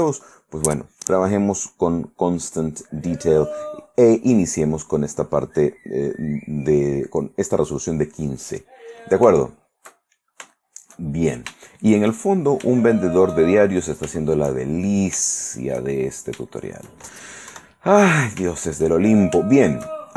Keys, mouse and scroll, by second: 8.6 click, 9.5-10.7 shift+middle drag, 13.0-14.3 shift+middle drag, 14.3-15.3 shift+middle drag, 15.5 shift+middle click, 16.1 shift+middle click, 16.7 shift+middle click, 17.7 KP_1, 18.7-20.1 shift+middle drag.